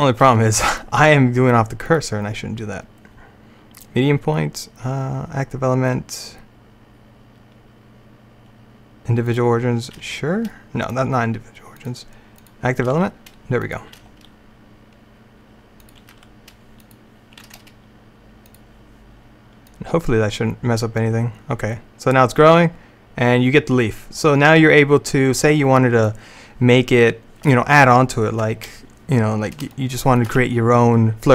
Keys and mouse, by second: 0.0 r, 1.9-3.8 drag, 10.1 r, 11.9-13.7 drag, 13.0 r, 14.0 g, 16.2 r, 17.5 g, 19.6-21.6 drag, 29.8-31.3 middle drag.